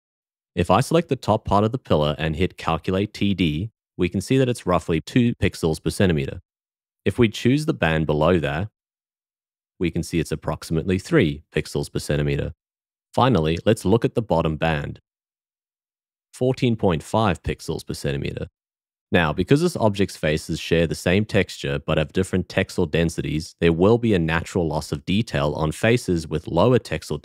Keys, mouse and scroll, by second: 2.3 a, 8.8 l, 14.8 l, 24.5-26.0 shift+drag.